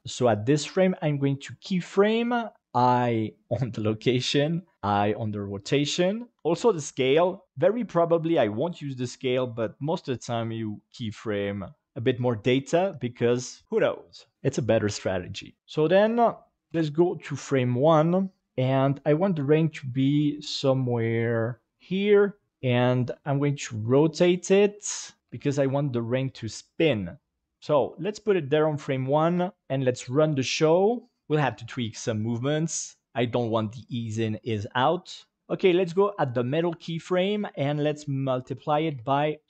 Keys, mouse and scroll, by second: 2.6 i, 4.7 i, 16.4 click, 18.4 KP_7, 19.3 g, 22.1 click, 22.5 r, 22.9 click, 23.7 r, 23.9 r, 24.7 click, 25.2 g, 26.6 click, 29.3 i, 29.6 i, 29.6 space, 31.2-35.4 drag, 36.8-39.4 drag.